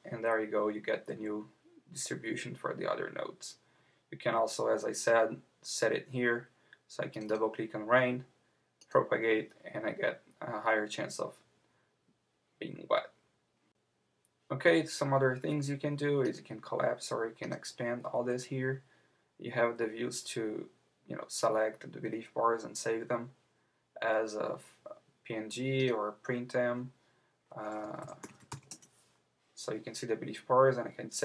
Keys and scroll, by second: 28.7 Return.